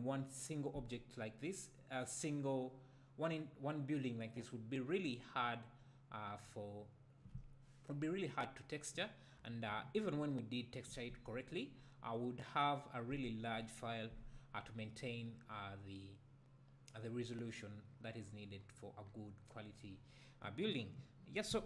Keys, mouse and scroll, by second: 9.4 `, 14.6-18.1 scroll up 2, 18.1-18.6 scroll up 1, 18.6-19.1 scroll down 2, 19.1-20.3 scroll down 1, 20.3-21.4 scroll down 1, 21.4-21.6 scroll up 2.